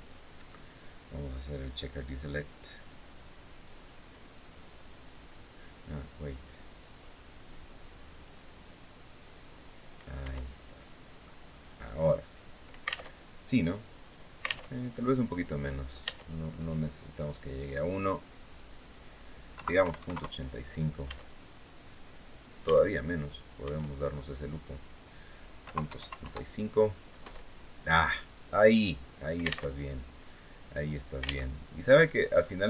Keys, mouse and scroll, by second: 1.0 click, 6.5-8.2 drag, 8.4-9.8 drag, 9.9 Tab, 10.5 middle click, 11.8 scroll up 1, 12.7 alt+Tab, 14.4 alt+Tab, 15.8 Tab, 17.3 click, 18.2 click, 19.3 KP_Decimal, 19.5 KP_8, 19.7 KP_5, 19.8 KP_Enter, 20.8 Tab, 22.4 Tab, 23.4 Tab, 24.3 click, 25.3 KP_Decimal, 25.6 KP_7, 25.7 KP_5, 25.9 KP_Enter, 26.9 Tab, 27.8-28.1 scroll down 2, 28.2 click, 29.4 alt+Tab, 31.2 alt+Tab, 32.1-32.5 scroll down 2.